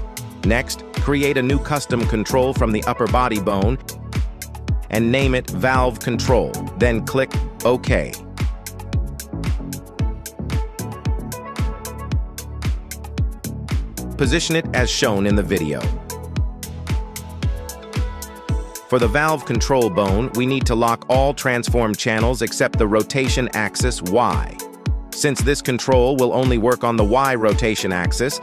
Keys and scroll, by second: 0.0 g, 0.5 Escape, 3.8 v, 4.2 l, 4.8 e, 6.0 c, 6.1 o, 6.4 n, 6.9 l, 7.1 Return, 9.6 g, 11.3 Tab, 12.6 shift+s, 13.6 g, 14.3 Escape, 15.2 Tab, 16.1 shift+s, 22.7 Return.